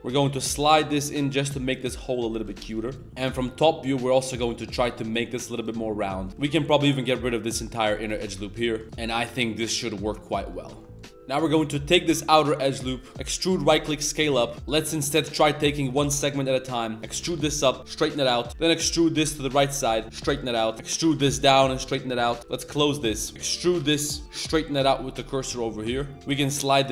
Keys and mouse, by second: 1.9 middle click, 3.0 typing, 8.1 a, 8.3 shift+w, 8.7 z, 8.8 Tab, 8.8 1, 9.7-10.4 middle drag, 10.7 Tab, 10.8 middle drag, 11.2 ctrl+s, 11.2 KP_7, 11.2 z, 12.7-13.1 drag, 14.5 ctrl+z, 14.5 2, 14.9 shift+middle click, 15.4 e, 18.5 2, 20.7 2, 22.9 a, 23.2 shift+w, 23.3 e.